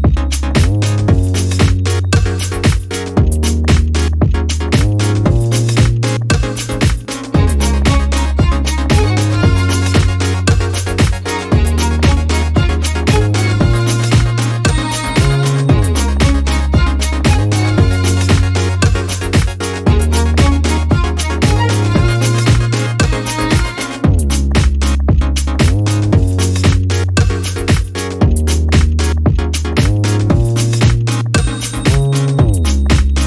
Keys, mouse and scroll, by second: 2.1 ctrl+a, 2.7 ctrl+click, 4.2 click, 6.4 ctrl+d, 7.0-9.1 ctrl+drag, 9.3 ctrl+d, 9.5-11.5 ctrl+drag, 11.5 ctrl+d, 12.0-14.0 ctrl+drag, 15.9 click, 17.0 shift+click, 17.9 shift+click, 19.0 shift+click, 19.9 a, 20.6 ctrl+shift+click, 23.1-24.4 shift+drag, 25.4 shift+click, 26.9 shift+click, 28.1 shift+click, 29.7 ctrl+y, 31.1 click, 32.2 shift+click, 33.1 shift+click.